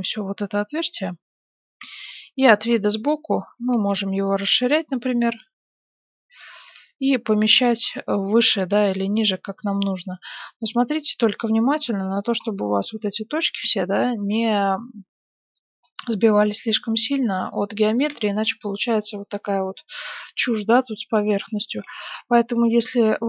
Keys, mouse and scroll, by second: 1.8 KP_3, 2.6-4.8 middle drag, 3.5 s, 6.5 g, 9.1-12.3 middle drag, 10.0 z, 12.5 middle click, 12.9 click, 13.6 middle click, 14.4 click, 14.4 right click, 14.8 middle click, 15.8-19.9 middle drag, 18.1 Tab, 21.1 Tab, 21.8-23.2 middle drag.